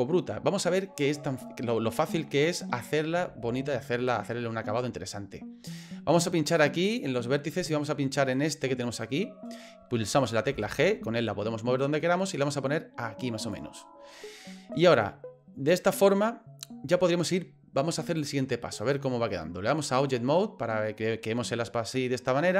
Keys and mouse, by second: 6.8 click, 8.3 right click, 10.5 g, 18.2-20.1 drag.